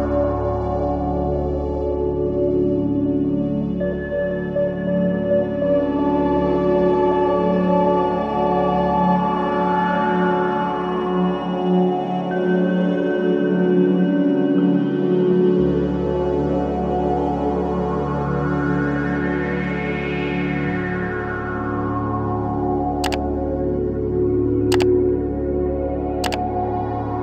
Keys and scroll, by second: 6.2 ctrl+z.